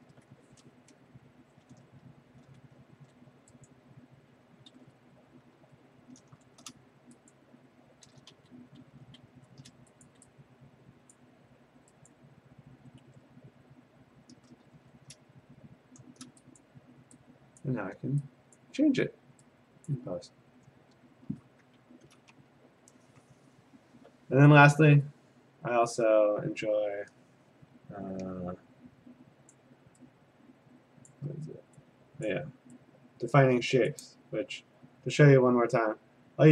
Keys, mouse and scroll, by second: 0.9 Return, 1.8-2.6 scroll, 2.9 a, 3.7 click, 4.8 ctrl+z, 5.6 a, 6.4 shift+a, 7.3 click, 8.1-9.7 typing, 10.1 click, 11.2 click, 12.1 click, 13.2 ctrl+z, 14.7 a, 16.6 click, 17.6 click, 18.6 click, 19.9 click, 23.0 alt+Tab, 24.0 alt+Tab, 29.5 click, 31.1 click, 32.3 click, 33.3 click, 33.9 click.